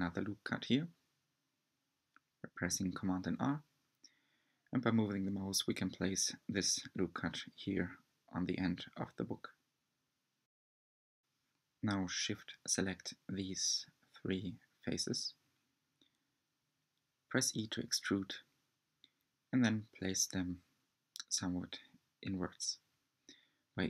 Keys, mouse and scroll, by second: 0.4-1.6 scroll up 5, 2.1 r, 9.9-10.6 scroll down 4, 10.6 middle click, 11.6-12.0 scroll down 1, 12.8 3, 13.5 click, 14.2 shift+click, 14.7-16.1 middle drag, 16.1 shift+click, 17.5 e, 19.0-22.1 middle drag, 23.1-23.8 drag.